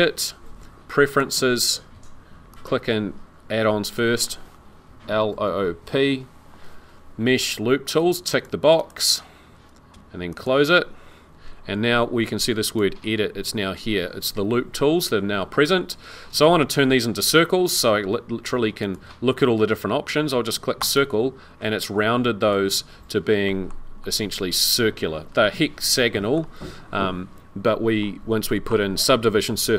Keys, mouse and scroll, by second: 12.6 click, 18.8 click, 20.8 click, 21.6 middle click, 22.7 scroll down 1, 23.4 shift+middle click, 23.4 shift+scroll up 1, 23.8 shift+scroll down 1, 24.0 middle click.